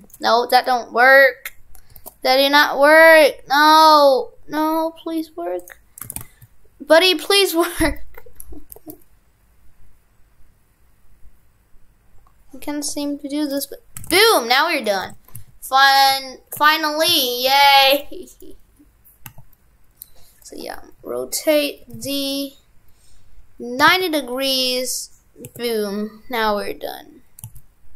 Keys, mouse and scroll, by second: 6.1 shift+f, 14.0 shift+f, 14.7 right click, 15.0 shift+f, 18.3 right click.